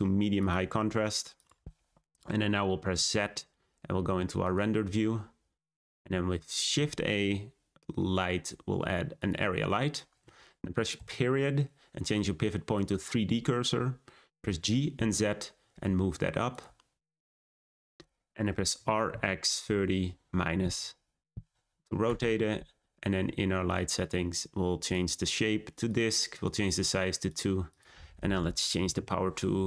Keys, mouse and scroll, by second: 2.9 z, 6.7 shift+a, 10.9 ., 14.3 g, 16.8-17.3 scroll down 2, 17.3-18.7 shift+middle drag, 18.7 r, 23.6 click, 24.7-27.3 drag, 27.6-28.9 drag, 28.9 0.